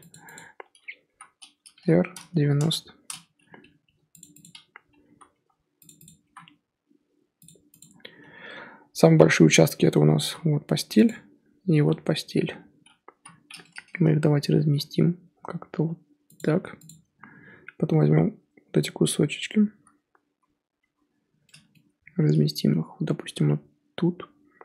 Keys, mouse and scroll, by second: 0.3 Left, 1.0 l, 1.7 r, 3.7 g, 4.4 click, 5.0 l, 5.3 g, 6.0 click, 6.2 l, 6.4 g, 7.8 click, 7.9-9.1 scroll down 1, 10.2 l, 11.0 click, 11.7 l, 13.1 l, 14.5 g, 16.8 Left, 18.0-19.7 l, 20.8 l, 22.0 g.